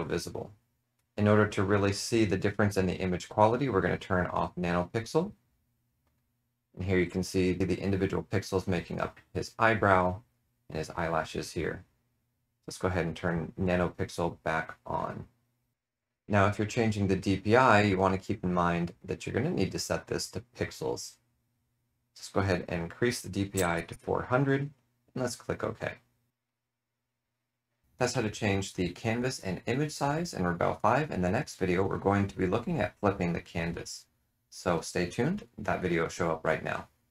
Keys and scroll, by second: 23.2-24.3 typing.